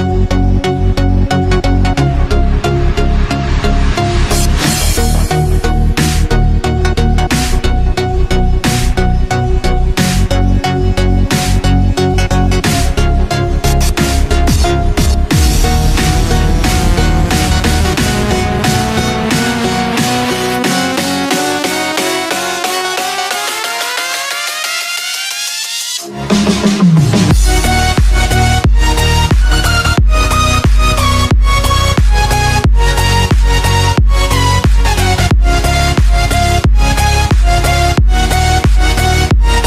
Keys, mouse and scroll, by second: 1.9 click, 3.0 scroll down 2, 4.7 click, 5.6 s, 7.6 KP_7, 8.4-9.1 scroll up 4, 9.7-13.0 drag, 13.4-14.4 middle drag, 14.4-15.1 scroll up 1, 15.1 KP_3, 15.7-16.6 scroll down 6, 16.6 click, 17.6-20.0 drag, 20.5 click, 22.2 s, 23.6 s, 26.1 KP_7, 26.6-28.1 scroll up 8, 28.7 KP_1, 29.6-30.3 scroll down 4, 30.4-32.2 drag, 34.3-36.4 drag, 36.9 KP_3, 38.8 click.